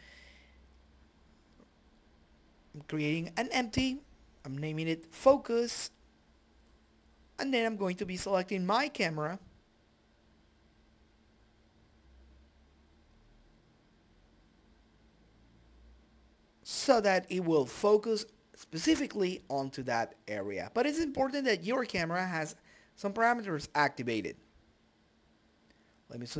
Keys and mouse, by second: 0.4 BackSpace, 0.9 click, 1.6 right click, 2.2 middle click, 3.3 g, 12.3 right click.